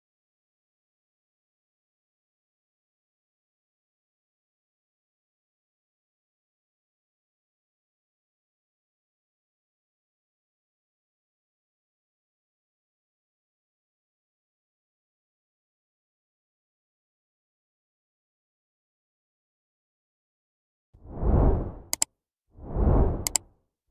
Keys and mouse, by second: 0.2 Tab, 0.6 a, 1.4 shift+middle click, 2.2 m, 4.5 Tab, 5.1 middle click, 5.9 ctrl+q, 7.8 ctrl+a, 10.8 n, 11.2 middle click, 12.7-13.7 drag, 13.8 middle click, 15.4 shift+middle click, 15.9-17.0 middle drag, 17.9 shift+middle click, 18.3 middle click, 19.2 middle click, 19.7 middle click, 20.0 middle click, 20.6 middle click.